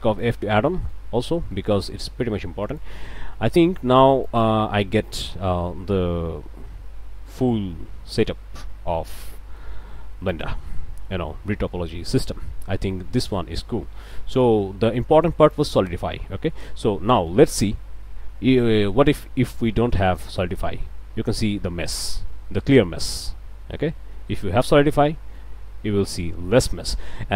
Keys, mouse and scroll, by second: 0.2 ctrl+middle click, 0.7 ctrl+shift+middle click, 1.5 ctrl+middle click, 1.9 ctrl+click, 2.6 ctrl+click, 3.1 ctrl+click, 4.2 click, 5.1 ctrl+z, 6.5 f, 8.3 Tab, 8.7 scroll down 2, 9.2 click, 10.3 click, 11.3 ctrl+2, 11.7-13.3 ctrl+drag, 13.3 click, 13.7 Tab, 13.9 scroll up 1, 14.2 click, 14.4 middle click, 15.5 click, 16.6 middle click, 20.1 click, 20.7-21.8 middle drag, 21.8 scroll up 1, 24.6 click, 25.4-26.4 drag, 26.5 scroll up 2.